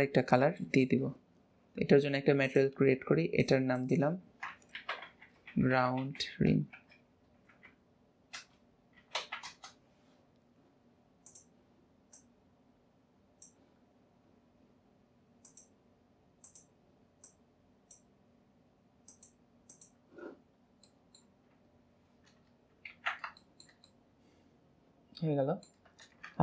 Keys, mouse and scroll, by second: 1.6-2.4 scroll up 2, 2.4-6.8 drag, 11.2 click, 15.4-16.5 drag, 19.7 click, 20.5-20.9 scroll down 2, 20.9 middle click, 21.2 Tab, 22.0-22.9 scroll down 1, 22.9 ctrl+s, 23.4-26.4 shift+middle drag.